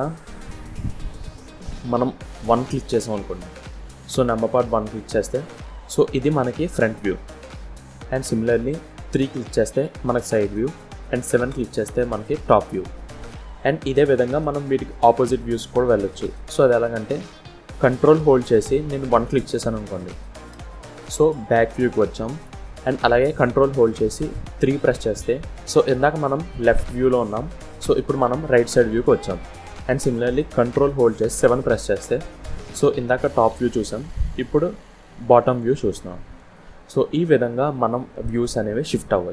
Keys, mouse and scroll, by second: 4.4 KP_1, 6.2-6.9 scroll up 5, 9.1 KP_3, 11.4 KP_7, 20.4 ctrl+KP_1, 24.7 ctrl+KP_3, 31.9 ctrl+KP_7, 37.3-37.6 scroll down 4, 38.0 middle click.